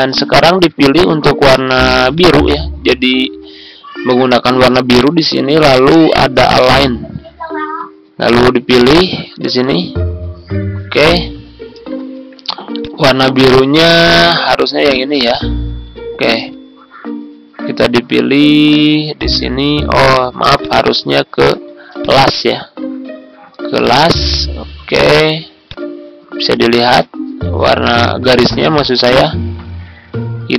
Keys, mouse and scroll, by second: 2.1 shift+click, 6.4-10.6 drag, 11.7 ctrl+z, 12.7 click, 14.8 shift+click, 15.2 click, 16.2 ctrl+z, 19.1 click, 19.9 ctrl+z, 20.6-26.6 drag, 27.4 ctrl+scroll up 1, 28.8 ctrl+click, 30.4 ctrl+scroll down 1.